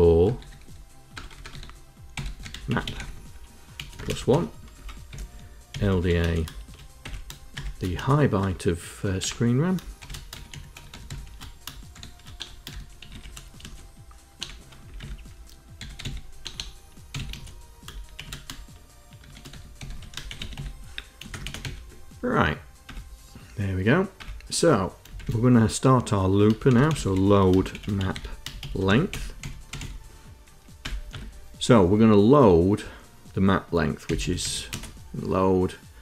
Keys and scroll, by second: 0.0-4.1 typing, 4.6 Return, 5.3-14.2 typing, 14.6 Return, 14.8 Tab, 15.4-18.0 typing, 19.1-21.4 typing, 21.1 KP_Add, 22.7 Return, 24.0 Return, 25.0 shift+;, 26.3-30.1 typing, 30.6 Return, 30.9 Tab, 33.6-34.7 typing.